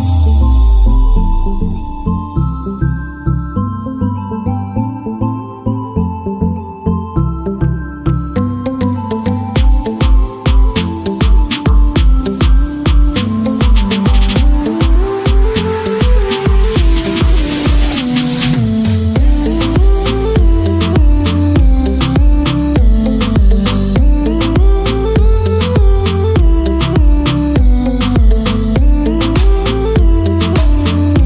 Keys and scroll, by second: 15.2 shift+,, 16.4-17.9 typing, 18.5 Caps_Lock, 19.3-22.8 typing, 23.3 Return, 24.3-26.9 typing, 28.4 shift+., 30.0-31.2 typing.